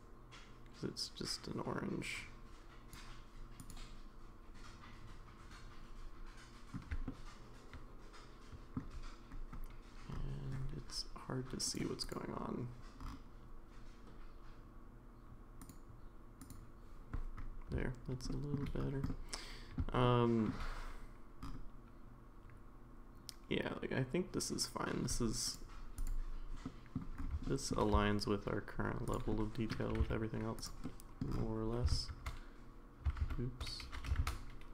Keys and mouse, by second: 3.6 click, 7.1-8.8 shift+middle drag, 11.7 click, 12.0 click, 15.6 click, 16.4 click, 18.3 shift+middle drag, 19.1-19.8 middle drag, 20.0-20.5 shift+middle drag, 26.6-27.0 middle drag, 27.5 shift+middle drag, 29.3-29.7 middle drag, 29.3 s, 29.9 g, 30.9-31.2 middle drag, 31.9 shift+z, 33.2 shift+z, 34.0 g.